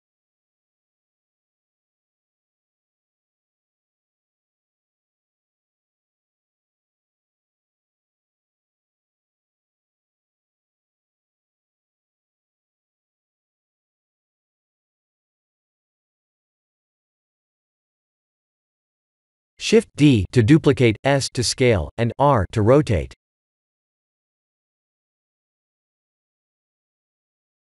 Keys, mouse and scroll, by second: 0.3 middle click, 0.4 middle click, 0.6 middle click, 0.7 middle click, 1.0 Tab, 1.3 middle click, 1.9 3, 3.9 ctrl+r, 8.2 ctrl+r, 10.9 middle click, 11.4 middle click, 11.6 Tab, 11.9 middle click, 12.1 middle click, 12.3 middle click, 12.6 middle click, 12.9 middle click, 13.8 middle click, 16.3 KP_1, 17.8 click, 20.0 shift+d, 22.8 g, 24.9 r.